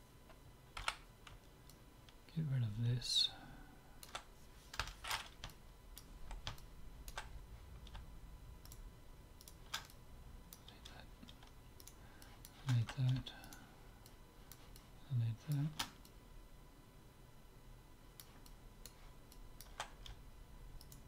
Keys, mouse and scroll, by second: 0.8 c, 5.5-8.3 middle drag, 8.7-11.1 drag, 9.9-11.4 middle drag, 11.9 right click, 12.2-13.9 middle drag, 13.9 right click, 14.1-17.8 middle drag, 14.6 click, 17.9 middle click, 18.4-21.0 middle drag, 20.8 click.